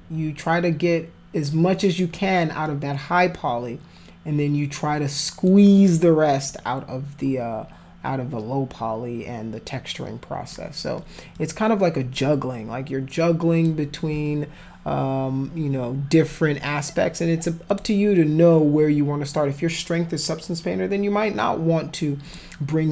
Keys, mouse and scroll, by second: 2.7-5.4 alt+drag, 6.5-10.5 alt+drag, 11.3-13.6 alt+drag, 17.7 click, 22.3 click.